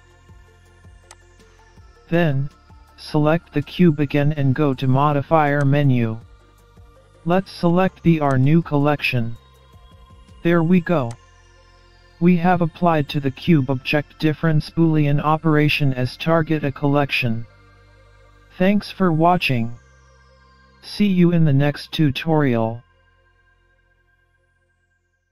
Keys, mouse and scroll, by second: 4.4 click, 6.2-6.5 scroll up 2, 6.5 middle click, 8.9 click, 11.6 click, 15.5-15.9 scroll up 2, 15.9 middle click, 18.6-19.3 scroll down 4, 18.9-20.6 scroll up 3, 19.3 middle click, 22.1-22.5 scroll down 3, 22.6-23.9 scroll up 2, 23.0 middle click.